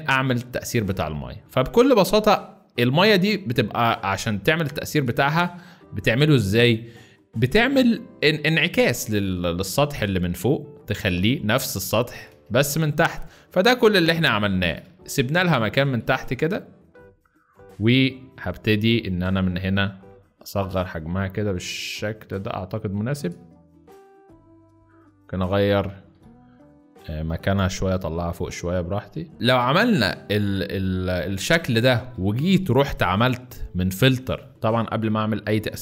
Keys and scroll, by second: 11.5 shift+space, 12.3 shift+space, 14.7 shift+space, 15.9 shift+space, 25.8 ctrl+shift+z, 27.3 Return, 27.9 Up, 28.1 Up, 28.3 Up, 28.5 Up, 28.7 Up, 29.3 space, 29.7 z, 31.3 space.